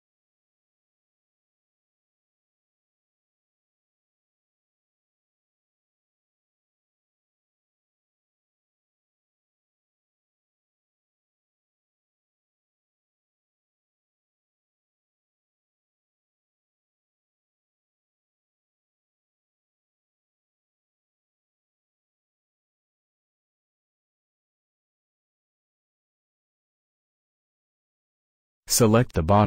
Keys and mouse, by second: 4.1 middle click, 4.8-5.8 middle drag, 8.7 middle click, 8.9 middle click, 9.1 middle click, 11.4 f, 12.3 middle click, 16.6-18.8 middle drag, 19.1 a, 19.7 click, 25.1-26.8 middle drag, 26.8 f, 28.7 a.